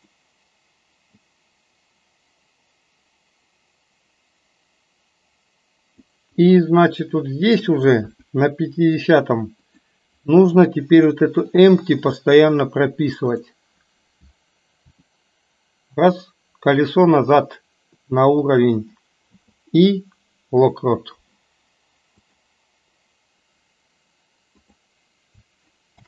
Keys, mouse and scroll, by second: 0.1 click, 1.3-6.2 drag, 6.4-7.7 middle drag, 8.2 KP_1, 9.7 click, 11.6-12.3 drag, 14.9 r, 19.2 i, 22.3 click, 24.6 click.